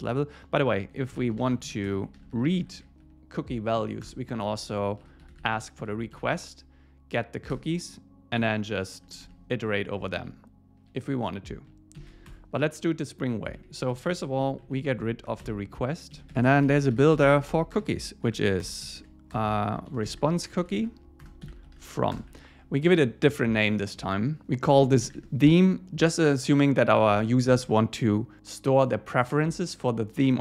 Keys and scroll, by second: 3.8 Down, 4.0 Return, 4.5 Down, 7.5 Return, 10.2 Down, 12.0 shift+super+Left, 13.6 Up, 13.9 super+Right, 14.2 Left, 14.8 alt+shift+Left, 16.2 Down, 21.2 Return.